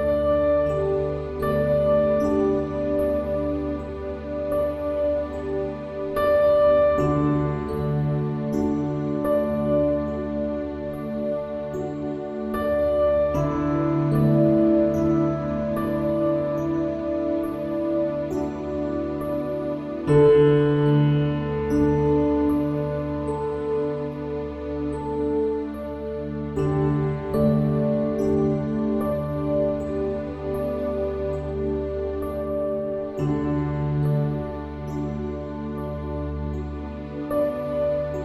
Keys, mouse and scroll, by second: 0.5 KP_1, 1.5 middle click, 1.8 e, 2.5 click, 3.1 KP_1, 3.6 click, 4.4 e, 5.2 click, 5.8 s, 7.2 Tab, 8.9 Tab, 9.8-10.9 drag, 11.5 Tab, 12.2 KP_1, 13.0 middle click, 13.8 click, 16.3 middle click, 17.1 Tab, 17.9 e, 18.7 e, 19.3 KP_1, 20.7 ctrl+KP_Add, 21.2 s, 22.8 ctrl+r, 23.2 s, 24.3 middle click, 25.1 ctrl+r, 25.7 ctrl+r, 26.7 click, 26.8 ctrl+b, 27.8 s, 29.9 click, 30.5 e, 31.5 KP_1, 31.8 e, 32.5 ctrl+KP_Add, 33.0 s, 33.8 middle click, 34.2 KP_1, 35.1 middle click, 36.6 middle click, 37.3 e.